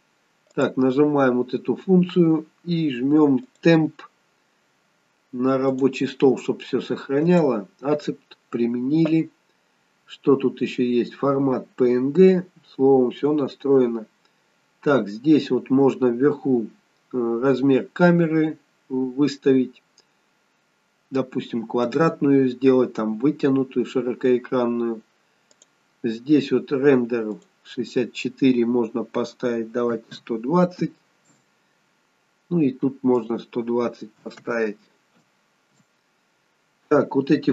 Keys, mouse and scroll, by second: 0.6 click, 3.5 click, 9.7-10.7 scroll down 3, 10.7-11.7 scroll down 2, 11.7 scroll down 2, 12.5-14.8 scroll up 1, 14.9-15.5 scroll up 3, 15.5-17.2 scroll up 4, 17.2-18.6 scroll up 1, 25.6 click, 27.5 click, 33.3 click.